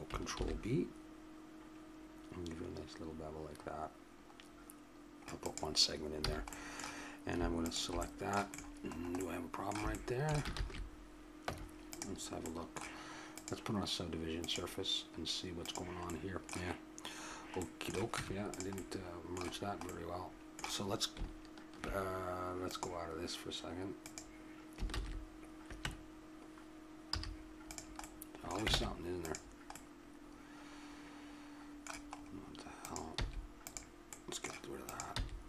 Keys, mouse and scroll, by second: 0.4 ctrl+b, 6.2 a, 6.5-8.9 drag, 9.2 click, 10.6 ctrl+z, 11.5 Tab, 13.3-14.5 drag, 14.7-16.1 drag, 16.1-18.1 middle drag, 18.1 Tab, 22.7-25.9 drag, 24.9 ctrl+z, 27.1 z, 28.7 ctrl+Tab, 32.2 middle click, 32.8 click, 33.2 x, 35.0-35.4 drag, 35.1 x.